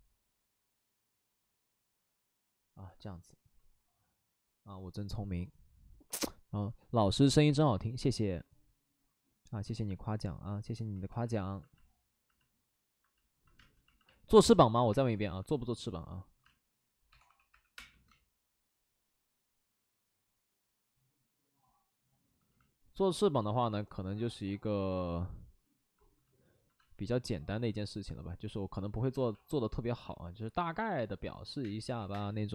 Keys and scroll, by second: 3.5 ctrl+z, 7.3 w, 11.0 2, 13.5 space, 14.4 space, 14.8 space, 16.4-17.7 typing, 26.7 space, 29.0 alt+s, 29.1 alt+s, 31.6 space, 32.0 3.